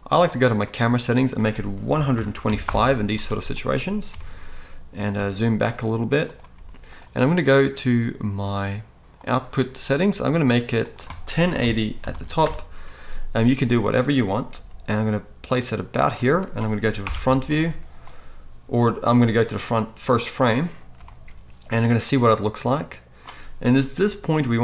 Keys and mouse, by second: 0.5 middle click, 0.6 right click, 1.1-6.3 middle drag, 4.1 g, 6.3-9.1 right drag, 6.5 g, 9.1 middle click, 9.2-10.8 right drag, 10.8-15.9 middle drag, 14.5 g, 15.9 click, 17.0 shift+Left, 21.2 right click, 22.0-24.6 drag, 24.0 g.